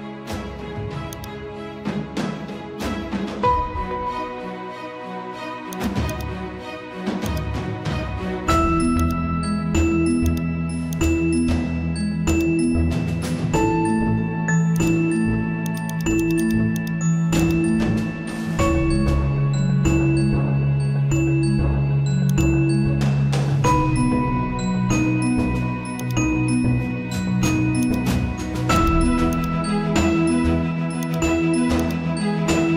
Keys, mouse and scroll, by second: 1.7-2.4 scroll up 1, 5.7-12.3 drag, 14.7 click, 18.5 scroll down 1, 19.4 scroll down 1, 21.8 right click, 22.3 right click, 23.8 click, 23.9-28.3 typing, 26.0 click, 27.8 click, 30.6 z, 31.0 click.